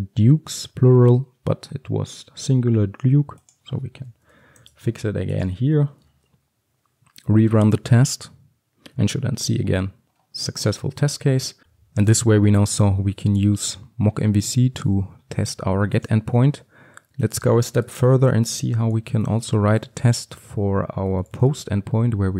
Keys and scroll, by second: 4.7 ctrl+s, 6.1 ctrl+F5, 20.4 Return.